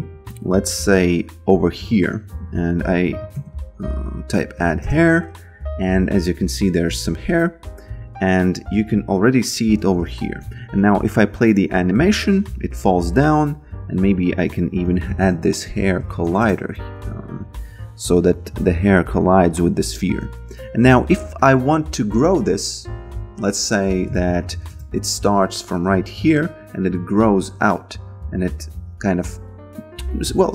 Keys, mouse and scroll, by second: 2.3-5.2 typing, 8.1 alt+right click, 8.7 b, 9.4 alt+middle click, 10.4 f, 12.5 f, 13.0 alt+click, 14.4-18.2 typing, 17.3 click, 19.1 alt+click, 19.6 alt+right click, 19.9 f, 21.4 alt+click, 24.1 shift+c, 24.3 d, 24.7 Return, 25.6 click, 28.3 click.